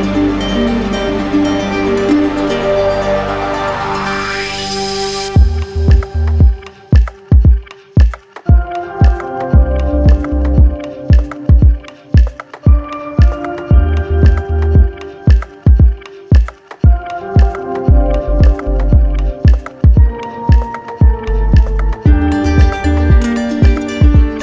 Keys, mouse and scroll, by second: 2.0 click, 2.5-3.0 shift+click, 3.3 shift+click, 4.0 shift+click, 4.4 shift+click, 4.9 shift+click, 5.3 shift+click, 5.8 shift+click, 6.2 shift+click, 6.7 shift+click, 7.1 shift+click, 7.6 shift+click, 7.8 shift+click, 8.1 shift+click, 8.7 shift+click, 10.5 click, 11.5 click, 13.0 click, 14.5 alt+click, 15.5 right click, 16.5 click, 17.1 alt+click, 17.6 alt+click, 18.1 alt+click, 18.6 alt+click, 19.6 alt+click, 20.1 alt+click, 20.6 alt+click, 20.8 alt+click, 21.2 alt+click, 21.6 alt+click, 22.0 alt+click, 22.5 alt+click, 22.8 alt+click, 23.1 alt+click, 23.8 alt+click, 24.2 alt+click.